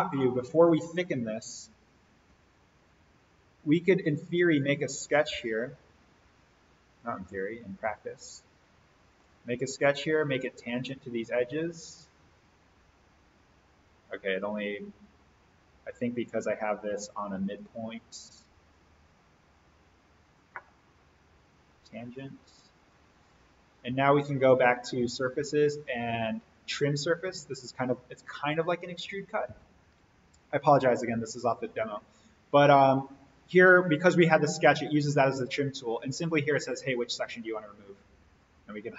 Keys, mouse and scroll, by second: 0.8-2.2 scroll up 1, 2.2 a, 4.6 click, 6.9 click, 9.8 Escape, 10.6 ctrl+click, 11.8 click, 18.2 Delete, 19.0 click, 20.2 ctrl+click, 29.0 click, 38.3 click.